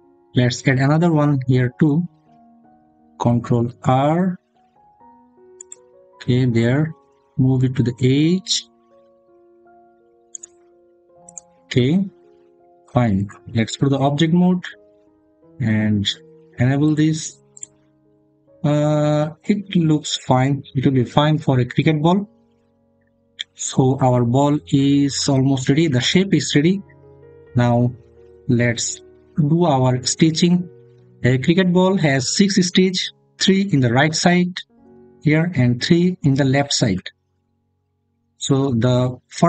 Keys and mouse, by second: 1.3 click, 3.1 ctrl+r, 5.4 click, 13.6 Tab, 16.7 click, 17.9 middle click.